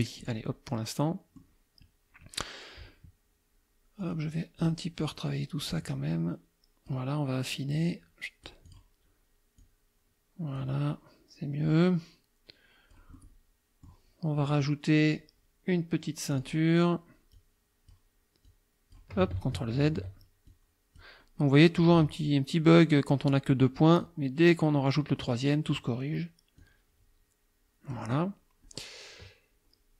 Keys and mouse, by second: 0.2 click, 0.8 click, 4.0 click, 4.6 click, 5.6-7.1 drag, 7.8 click, 9.6-10.8 drag, 11.7-13.1 drag, 16.3 click, 17.4 click, 18.5 click, 19.4 ctrl+z, 20.5 ctrl+click, 24.0-25.4 drag, 26.6-28.1 drag.